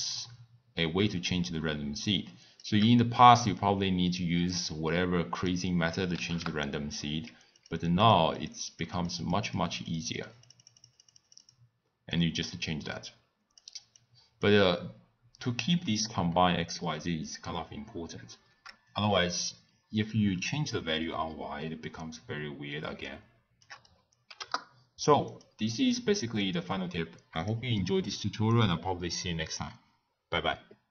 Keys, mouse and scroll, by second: 6.3-22.0 drag, 24.4-27.5 drag, 28.6 click, 29.4-30.9 scroll down 1.